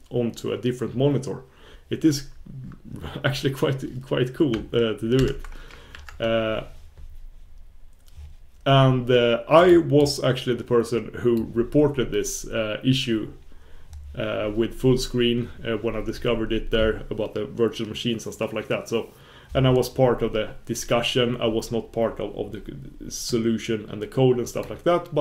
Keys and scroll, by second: 5.9 super+1.